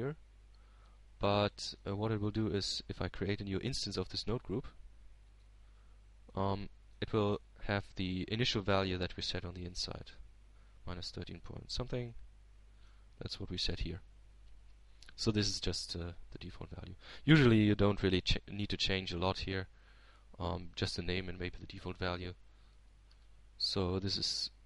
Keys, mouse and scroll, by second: 0.6 shift+Tab, 1.2-2.2 shift+middle drag, 4.5-5.9 middle drag, 5.9 shift+a, 8.9-11.0 drag, 10.1 right click, 11.0-12.2 middle drag, 13.3 click, 13.8-15.5 middle drag, 14.8 Tab, 15.8-17.3 middle drag, 20.3 click.